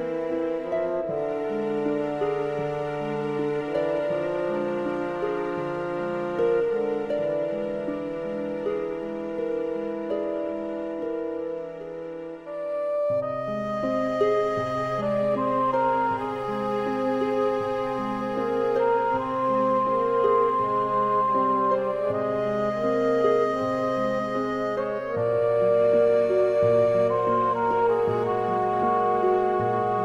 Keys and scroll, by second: 12.6 super+;, 19.5 super+z, 26.1-26.5 typing.